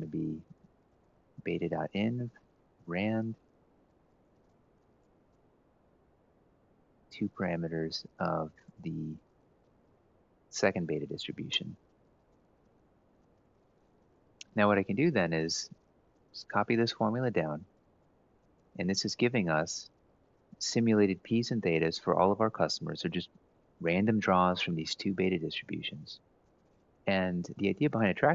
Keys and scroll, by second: 0.0-3.1 typing, 6.2 F4, 6.2-7.3 typing, 8.8-10.0 typing, 11.1 Return, 12.3 Left, 14.0 Up, 14.2 Right, 15.8 ctrl+c, 16.6 ctrl+shift+Down, 17.4 ctrl+v.